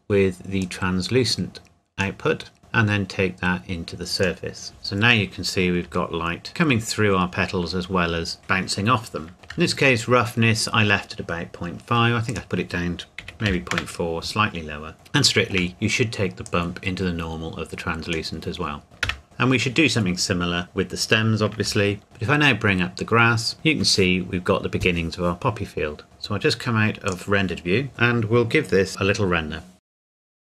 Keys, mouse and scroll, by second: 0.8 click, 5.8 click, 6.1 shift+middle click, 6.9 scroll down 1, 9.3 shift+middle click, 9.7-11.8 scroll up 1, 11.8 scroll up 1, 12.3 click, 13.2 KP_Decimal, 13.4 KP_4, 13.7 KP_Enter, 15.0 shift+middle click, 15.7-16.4 scroll down 1, 16.4 click, 19.1 KP_0, 19.2 scroll up 1, 21.6 ctrl+Num_Lock, 22.0 ctrl+s, 23.5 click, 27.5 click.